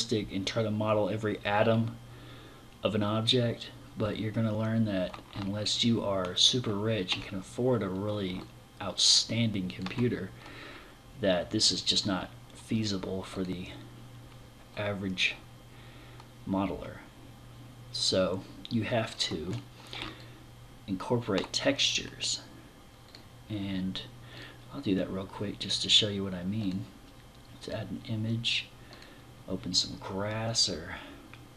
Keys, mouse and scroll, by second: 5.1 middle click, 7.8 middle click, 18.9-19.6 scroll down 1, 19.6 middle click, 19.6 scroll down 1, 22.5 click, 23.8 click, 26.1 click, 28.3 click.